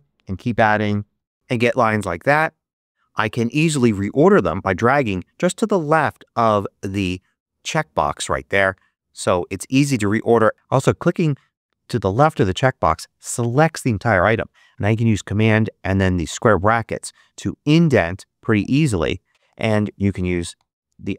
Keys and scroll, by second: 0.0-1.7 typing, 16.6 super+], 18.4 super+], 20.5 super+[.